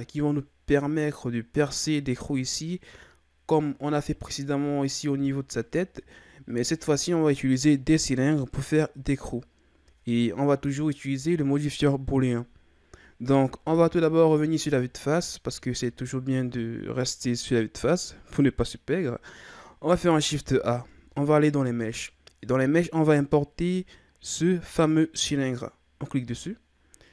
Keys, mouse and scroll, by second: 3.0-3.6 scroll down 1, 3.6-4.4 middle drag, 4.4-4.8 scroll down 2, 4.8-6.3 shift+scroll up 7, 6.7-8.4 middle drag, 8.4-11.6 shift+scroll down 6, 13.7 KP_1, 15.0-15.5 ctrl+scroll down 2, 15.5-16.2 shift+scroll up 4, 16.2-16.7 ctrl+scroll down 4, 20.3 shift+a.